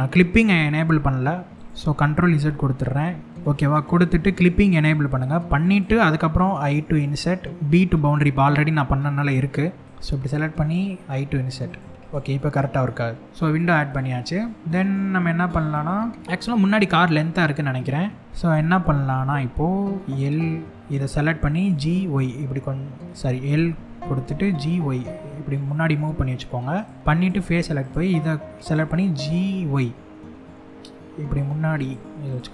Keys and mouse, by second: 1.7 ctrl+z, 3.3 ctrl+z, 4.4 click, 5.3 click, 11.3 click, 11.7 click, 12.2-13.2 middle drag, 13.5-16.2 middle drag, 16.9 middle click, 18.2 middle click, 21.6 y, 22.8 right click, 24.4 y, 26.4 click, 27.0 3, 27.5 click, 29.1 y, 31.4 click, 31.9 click, 32.2-32.5 middle drag.